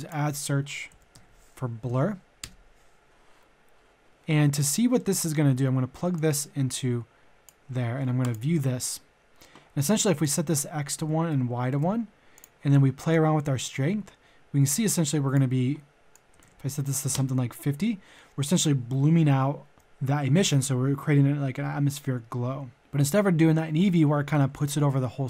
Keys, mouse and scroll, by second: 0.7-1.2 typing, 2.4 Return, 4.1 click, 4.9 middle click, 6.1-7.8 drag, 8.2 ctrl+shift+click, 10.8 click, 11.1 Tab, 12.4-15.8 drag, 16.3 KP_5, 17.2 KP_0.